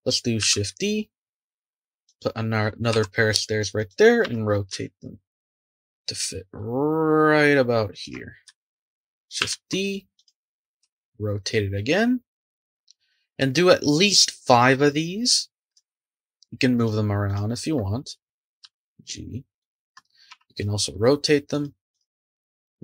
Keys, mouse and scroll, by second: 0.4 shift+d, 2.9 r, 4.2 g, 9.4 shift+d, 10.8 r, 15.2 click, 15.9 shift+click, 16.7 shift+click, 17.2 shift+click, 18.6 g, 20.3 r, 21.9 click, 22.2 g.